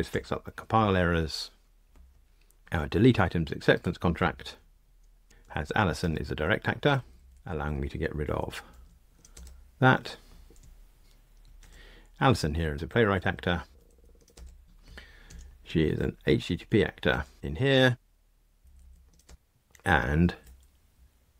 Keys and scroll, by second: 0.0 super+F9, 17.1 Return.